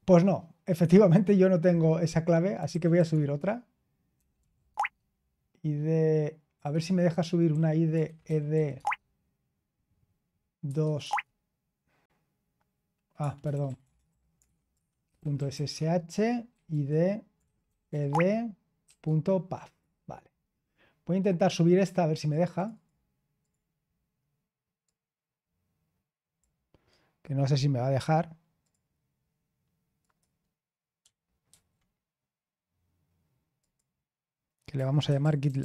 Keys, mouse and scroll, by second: 2.3-4.9 typing, 6.5-9.0 typing, 10.6 typing, 13.1-19.0 typing, 22.2 click, 31.2-32.3 typing, 33.5-35.6 typing, 33.5 click.